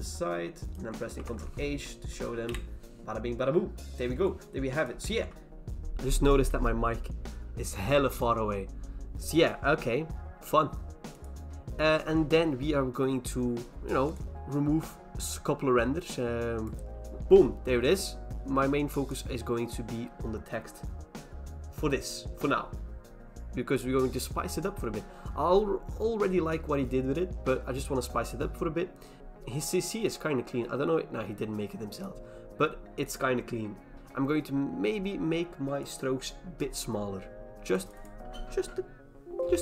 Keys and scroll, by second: 1.1 ctrl+h, 1.7 Return, 2.4 BackSpace, 5.1 ctrl+z.